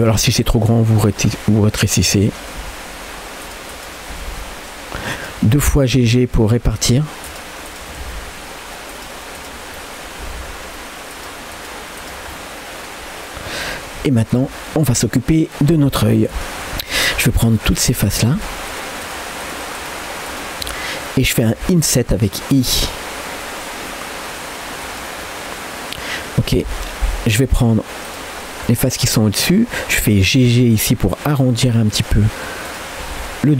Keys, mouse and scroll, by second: 0.2 g, 1.3 middle click, 1.9 click, 2.1 middle click, 2.6 g, 3.7 click, 4.2 g, 5.8 click, 6.1 g, 7.3 click, 8.0 g, 9.4 click, 9.8 scroll up 1, 9.8 middle click, 10.3 g, 11.5 click, 12.0 click, 12.3 middle click, 13.7 middle click, 14.0 Tab, 14.2 scroll down 1, 14.5 shift+middle click, 16.3 Tab, 16.4-19.4 shift+drag, 20.8 scroll up 1, 21.1 middle click, 22.8 i, 25.3 middle click, 27.4 click, 28.4 scroll up 1, 28.7 middle click, 29.2 shift+middle click, 30.4 g, 32.7 click, 33.0 g.